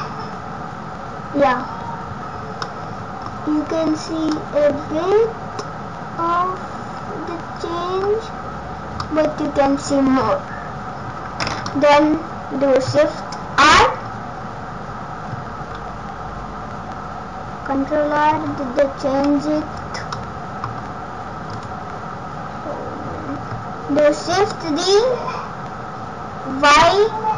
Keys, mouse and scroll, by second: 0.0-0.5 scroll down 2, 1.4 scroll down 5, 2.1-2.6 scroll up 3, 2.6 middle click, 3.3 scroll up 2, 4.3 middle click, 9.0 middle click, 11.7 middle click, 13.6 shift+r, 13.9-15.0 scroll down 4, 15.5 shift+r, 18.3 ctrl+r, 19.1 scroll up 2, 19.7-20.0 scroll down 4, 20.0 scroll up 3, 20.1 middle click, 20.7 scroll down 2, 21.2 scroll up 1, 21.5 click, 24.3 shift+d.